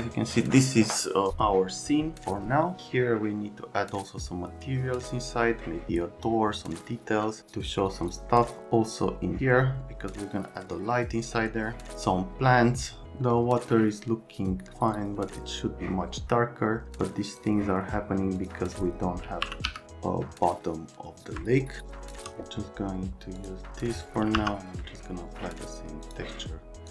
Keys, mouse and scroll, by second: 12.2 right click, 13.3 right click, 17.3 click, 18.4 click, 19.2-20.1 typing, 19.8 alt+right click, 24.1-24.9 typing.